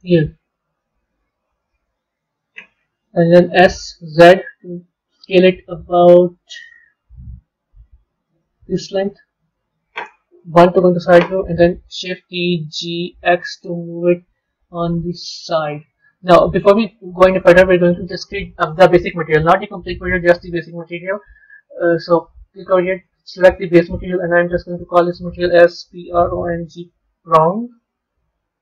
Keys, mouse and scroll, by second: 0.7 KP_3, 1.2-1.8 scroll up 5, 1.8-3.4 scroll down 2, 3.4 s, 10.3 KP_1, 12.1 shift+d, 15.8-19.0 middle drag, 21.8 click, 22.8-24.7 drag, 24.8-28.6 drag.